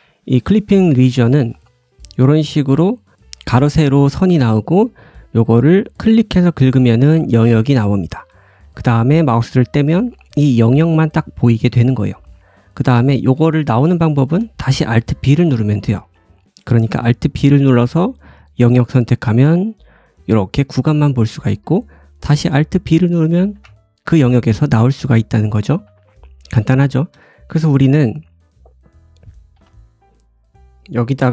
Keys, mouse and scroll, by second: 10.9 middle click, 11.5-12.0 scroll up 2, 12.0 middle click, 12.7 alt+b, 12.7 `, 13.4 scroll up 1, 14.1 shift+middle click, 14.6-15.0 scroll down 2, 15.5 shift+middle click, 17.2 alt+b, 18.3-18.8 middle drag, 22.6 middle click, 23.3 alt+middle click, 23.4 alt+b, 25.0-25.4 scroll down 1, 25.4 middle click, 25.7 `, 26.2-26.7 scroll down 3, 26.7 shift+middle click, 28.3-28.8 scroll up 1, 29.2 middle click, 29.2 click, 29.2-31.3 right drag.